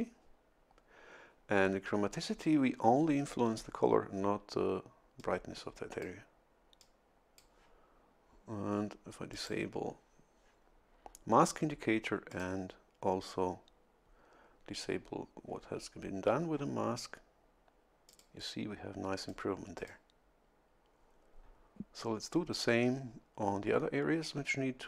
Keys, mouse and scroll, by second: 5.2-6.2 drag, 6.8 click, 9.3 click, 12.3 click, 18.1 click, 19.2 click, 19.8 click, 22.0-23.3 drag.